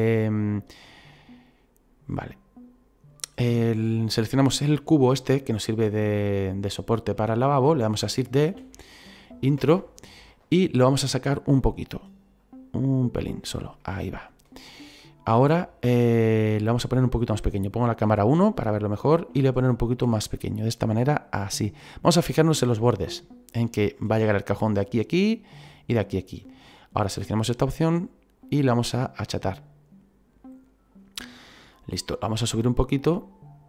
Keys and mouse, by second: 0.1 middle click, 8.5 shift+d, 9.6 Return, 9.6 KP_Enter, 11.0 click, 12.4 click, 13.8 middle click, 15.0 middle click, 18.1 KP_1, 19.3 s, 21.5 click, 27.0 click, 28.4 click, 32.1 click.